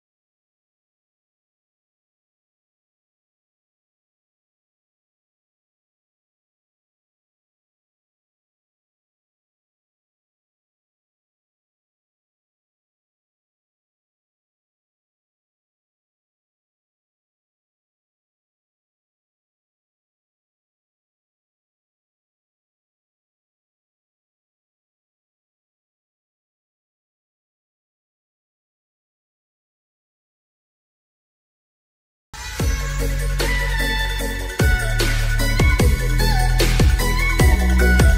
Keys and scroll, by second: 35.9 ctrl+e.